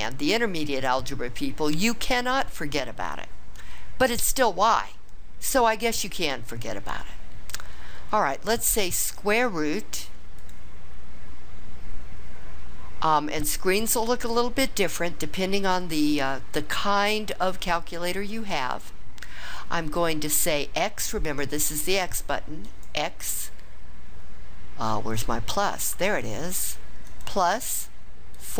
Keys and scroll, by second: 28.3 4.